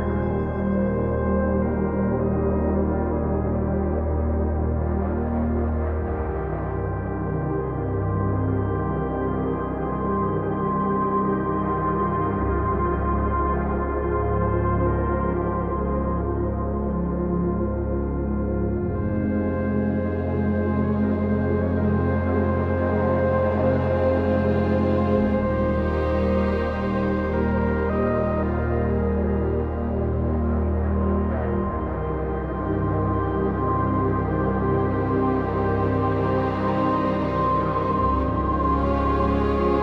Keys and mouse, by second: 0.3 shift+click, 1.1 j, 2.7 j, 3.5 shift+click, 4.4 j, 4.8 click, 5.3 shift+click, 6.0 j, 8.3 j, 9.5 click, 10.1 shift+click, 10.9 j, 12.3 shift+click, 13.1 j, 14.9 j, 15.4 click, 15.8 shift+click, 16.6 j, 18.9 j, 21.0 j, 23.5 j, 24.3 click, 25.7 j, 27.5 j, 28.0 click, 28.5 shift+click, 29.4 j, 29.7 click, 31.0 j, 32.9 ctrl+click, 34.3 j, 34.8 click, 36.0 j, 37.6 j, 38.6 shift+click, 39.4 j.